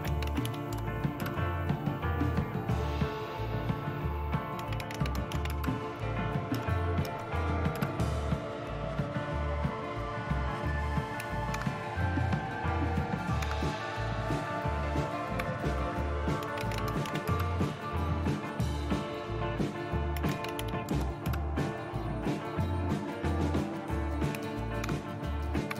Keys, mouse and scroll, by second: 0.0-0.9 typing, 1.2 Return, 4.4-5.8 typing, 6.5 Up, 7.0 Up, 7.7 Return, 11.6 super+Left, 13.4 super+Left, 16.2-17.5 typing, 19.9-21.1 typing, 21.2 Return, 24.8 super+Left.